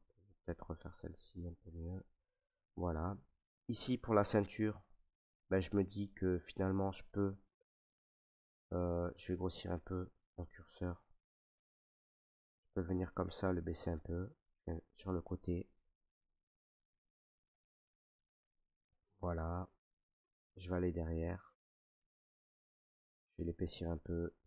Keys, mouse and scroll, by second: 0.4 ctrl+right click, 2.0 click, 2.6 ctrl+right click, 3.7 right click, 4.2 click, 4.3 alt+right click, 5.0 ctrl+right click, 5.5 alt+right click, 8.7 click, 9.1 ctrl+z, 10.0 s, 10.9 click, 13.4 click, 14.4 right click, 15.2 alt+right click, 16.3 right click, 19.1 click, 20.4 click, 21.2 alt+right click.